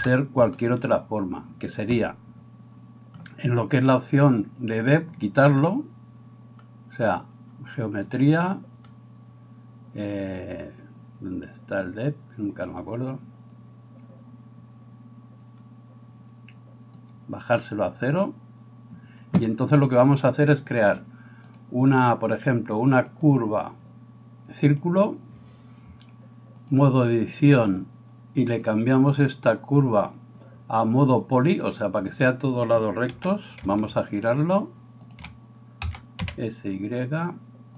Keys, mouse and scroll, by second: 0.0 KP_7, 17.0-35.2 drag, 17.2-37.7 middle drag, 33.2 r, 35.9 s.